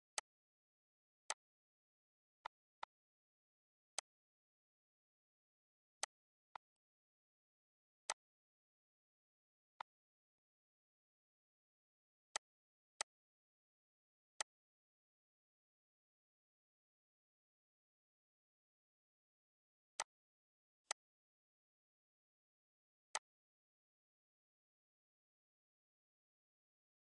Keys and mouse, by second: 0.0 click, 0.5 ctrl+z, 1.1 click, 2.1 click, 3.1 Delete, 3.3 click, 4.7 click, 5.3 click, 7.0 typing, 7.3 click, 8.9 click, 9.6 click, 11.3 click, 12.6 click, 13.2 ctrl+s, 14.2 click, 19.8 click, 20.7 ctrl+click, 22.9 click.